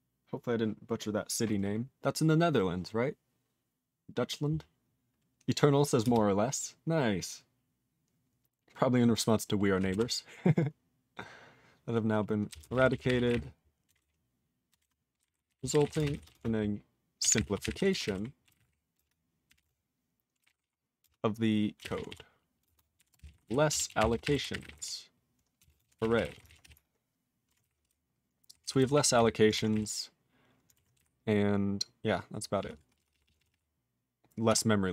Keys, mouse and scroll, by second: 6.0 d, 9.9 r, 12.2-16.4 typing, 22.4-27.1 typing, 29.7 w.